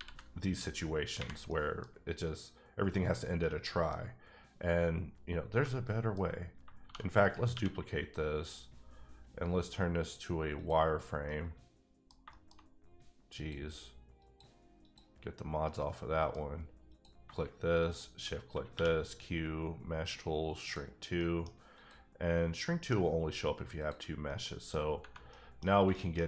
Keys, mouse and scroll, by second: 1.5 middle click, 2.3-3.4 scroll up 1, 3.4 middle click, 5.2 scroll down 1, 5.6 middle click, 6.5 shift+middle click, 6.8 shift+d, 7.4 right click, 7.5 q, 10.5 click, 11.3 middle click, 12.2 shift+middle click, 13.3 click, 14.2 click, 14.8 click, 15.9 middle click, 17.2 shift+click, 18.7 q, 20.6 click, 21.2 middle click, 21.7 click, 22.6 middle click, 23.8 click, 24.2 middle click, 25.3 middle click, 25.6 scroll up 2, 25.9 shift+middle click.